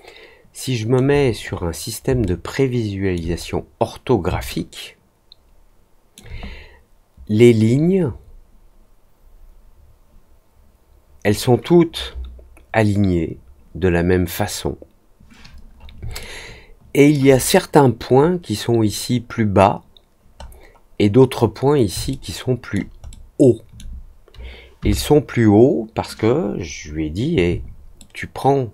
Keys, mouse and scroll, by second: 1.4 scroll up 1, 2.2 alt+middle click, 3.3-3.9 scroll down 2, 4.4-6.1 alt+middle drag, 16.1 alt+middle click, 20.3 middle click, 22.0 alt+middle click, 23.0 alt+middle click, 26.4-26.8 scroll down 1, 27.9 alt+middle click.